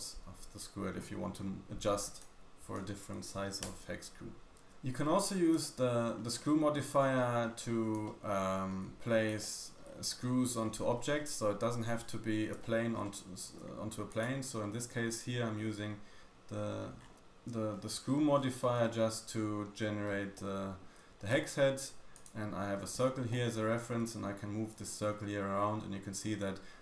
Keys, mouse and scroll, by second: 4.5-5.0 scroll down 3, 4.5 a, 5.0 a, 5.5-6.0 shift+middle drag, 6.0-6.8 scroll up 3, 7.1 middle click, 7.6-8.3 scroll down 4, 7.9-8.8 shift+middle drag, 9.0-9.3 scroll up 2, 9.3 shift+middle click, 9.4-9.8 shift+scroll down 1, 9.8-10.5 shift+scroll up 4, 10.4 shift+middle click, 10.5 shift+scroll down 1, 11.1 scroll down 1, 11.7 scroll down 1, 12.0-12.5 scroll up 2, 12.5-13.0 shift+middle drag, 12.6-13.0 shift+scroll down 1, 14.1 click, 14.6 middle click, 15.1 click, 15.7-17.2 scroll down 11, 17.7-18.6 scroll up 7, 18.8-20.3 shift+drag, 18.8 shift+middle click, 20.3 shift+middle click, 21.1-22.1 scroll up 3, 22.1 click, 22.1 scroll up 1, 23.0 Tab, 23.4 middle click, 23.8 g, 25.4 click.